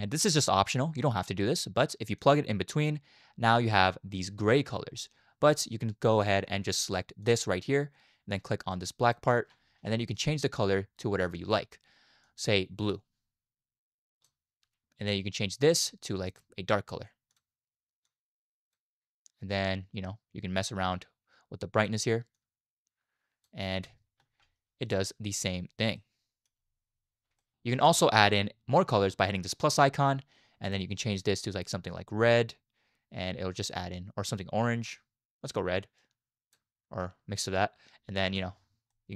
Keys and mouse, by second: 7.3 click, 9.0 click, 15.6 click, 19.6-21.8 drag, 22.4-23.5 drag, 23.7 space, 24.8 shift+middle drag, 26.0-26.5 middle drag, 27.4 middle click, 27.7 space, 28.0 click, 29.6 click, 30.7 click, 38.3 space, 38.9-39.1 middle drag.